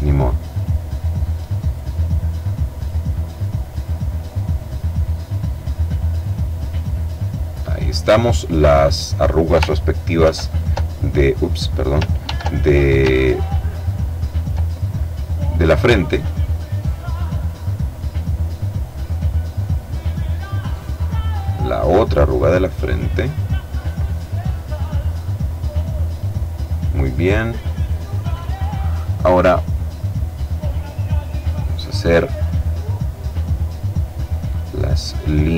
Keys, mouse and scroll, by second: 0.5-1.5 drag, 1.5-2.6 drag, 3.9 click, 5.2 click, 6.0 click, 8.1 click, 9.4 ctrl+f, 10.8 click, 11.5 ctrl+d, 12.4-14.2 ctrl+drag, 14.5 click, 15.7 click, 17.4 click, 19.2 click, 20.7-21.7 scroll down 1, 22.4-22.8 scroll down 1, 22.8-23.8 scroll up 1, 23.8-24.4 scroll down 1, 24.4-25.2 scroll down 1, 25.2-25.7 scroll up 1, 29.7 click, 30.4-31.7 middle drag, 33.3 click, 33.9-35.0 scroll up 1, 35.0 click.